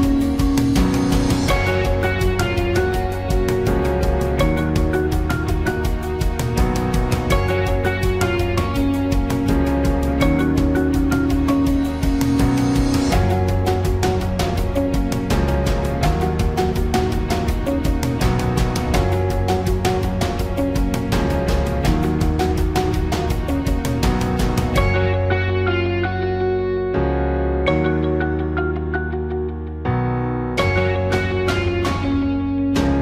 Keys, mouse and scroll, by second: 22.1 click.